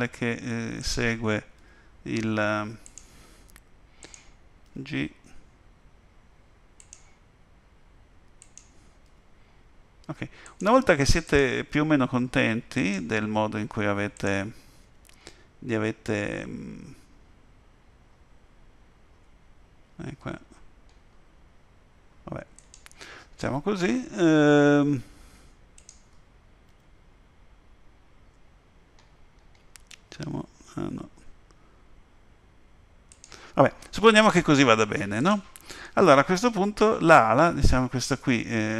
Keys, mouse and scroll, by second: 0.8 click, 1.6 g, 4.0 click, 4.7 g, 8.4 click, 9.1 g, 11.3 click, 12.0 g, 14.2 click, 14.8 g, 25.8 click, 26.7 g, 35.2 click, 35.9 middle click.